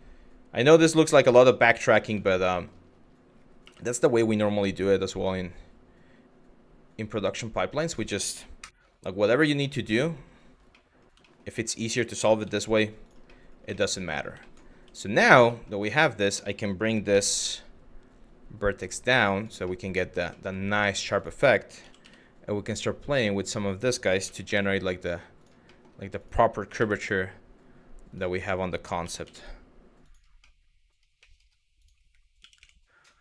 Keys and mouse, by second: 0.9 click, 2.1 shift+middle click, 3.3 3, 3.7-7.6 drag, 8.2 Delete, 9.7 middle click, 10.5 middle click, 10.9 middle click, 11.4 middle click, 12.0 z, 13.0 middle click, 13.4 middle click, 13.8 middle click, 14.1 middle click, 14.4 1, 14.8 click, 15.2 shift+middle click, 15.6 middle click, 16.1 shift+middle click, 16.7 g, 19.0 click, 19.4 middle click, 20.8 click, 21.4 g, 21.7 y, 22.9 click, 23.5 click, 23.9 g, 25.0 click, 25.4 middle click, 25.8 click, 26.4 g, 27.7 click, 28.2 click, 28.7 g, 29.6 click, 30.1 middle click, 30.8 middle click, 32.0 g, 32.2 y.